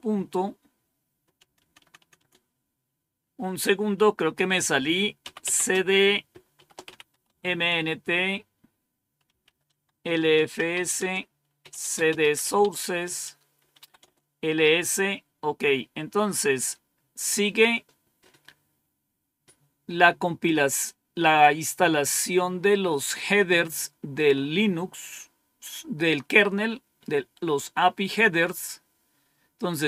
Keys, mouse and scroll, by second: 1.3-2.1 typing, 4.9-7.5 typing, 9.1-14.2 typing, 28.4-29.7 scroll up 1, 29.7-29.8 scroll down 2.